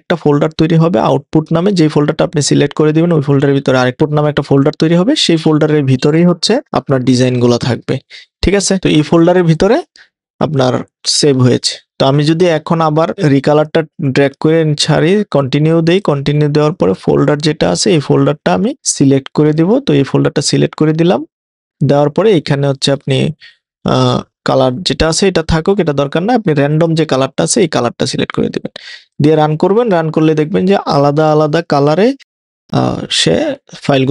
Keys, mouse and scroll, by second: 8.8 Return, 11.0 click.